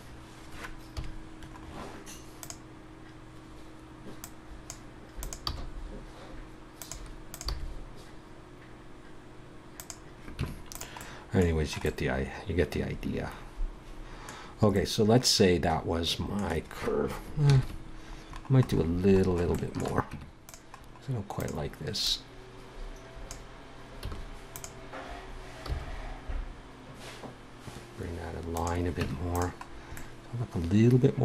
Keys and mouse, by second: 0.9 KP_3, 2.4-5.2 drag, 5.4 g, 7.5 g, 10.4 Tab, 14.7-16.0 middle drag, 20.1 Tab, 21.4-22.5 right drag, 22.5-23.9 drag, 24.0 a, 24.5-26.5 drag, 25.6 g, 29.0 Tab.